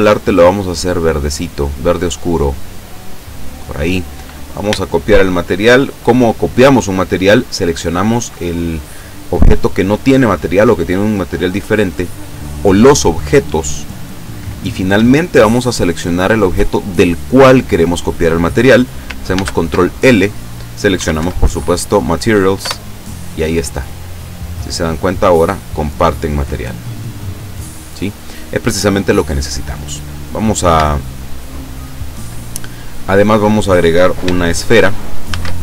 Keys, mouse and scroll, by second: 2.4 click, 4.3 right click, 4.8 shift+right click, 7.0 right click, 15.7 shift+right click, 19.3 ctrl+l, 21.0 Up, 21.3 Down, 22.7 Return, 24.1 right click, 24.7 right click, 25.1 right click, 26.8 right click, 29.6-30.0 scroll down 1, 30.9 shift+middle click, 31.7 shift+right click, 32.9 scroll up 1, 35.3 shift+a.